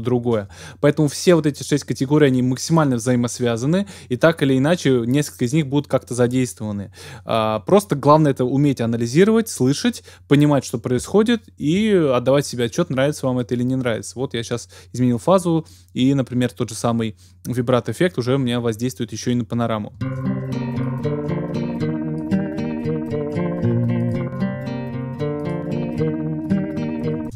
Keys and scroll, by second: 20.0 typing, 27.2 typing.